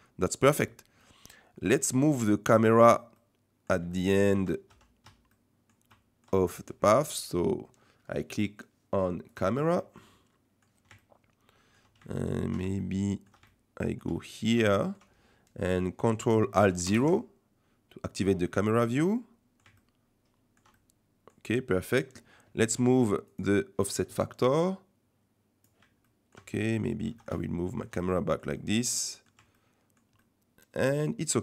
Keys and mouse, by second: 1.0-2.7 middle drag, 3.2 click, 3.9 shift+middle click, 5.3 middle click, 5.9 middle click, 9.9 shift+middle click, 11.0 shift+middle click, 12.1 shift+middle click, 12.8 ctrl+middle click, 13.4 shift+middle click, 14.1 middle click, 16.8 ctrl+alt+KP_0, 18.4 click, 19.8-20.6 shift+drag, 20.7 click, 20.9 middle click, 23.3 click, 24.6 click, 26.0 shift+click, 26.8 middle click, 27.2 middle click, 27.4 ctrl+click, 28.6 click, 29.6 shift+click, 30.2 shift+click.